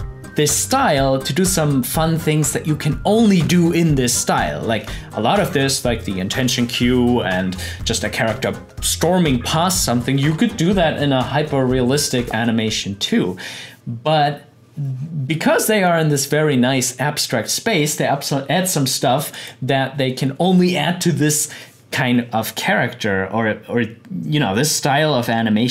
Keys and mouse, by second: 19.5 click, 22.6-25.7 drag.